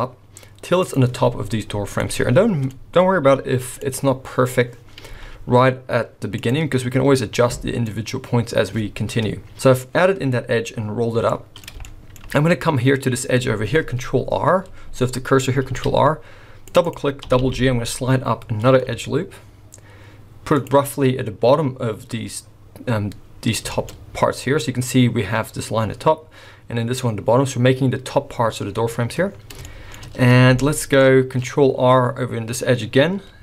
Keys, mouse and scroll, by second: 1.1 scroll up 5, 1.5-2.0 scroll down 3, 2.0 middle click, 3.4 z, 4.2-4.8 scroll down 1, 4.8 scroll down 1, 5.1 z, 7.4 middle click, 9.5 middle click, 9.5 scroll down 1, 9.8-10.6 scroll up 1, 10.6-11.3 scroll up 2, 11.3 middle click, 11.8 shift+middle click, 15.7 ctrl+r, 17.2 g, 23.3-24.9 scroll up 5, 23.7 shift+middle click, 24.9-26.5 scroll up 1, 28.7-29.6 scroll down 9, 29.6 shift+middle click, 30.6 shift+middle click, 31.1-32.4 scroll up 1, 32.4 scroll up 1, 32.9 ctrl+r.